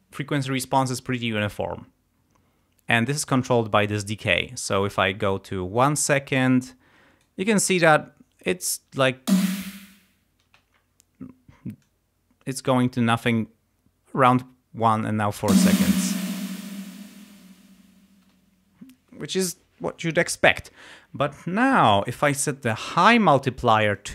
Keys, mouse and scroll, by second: 3.2-7.4 drag, 9.2 space, 10.5 space, 11.8-13.5 drag, 15.5 space, 24.0-24.1 drag.